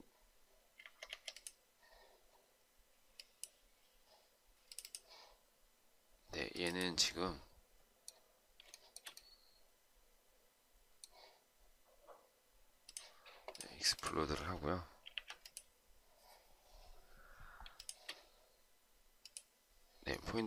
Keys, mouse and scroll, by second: 0.6 Escape, 0.9 Escape, 8.6 shift+right click, 14.9 Delete, 17.4 shift+click.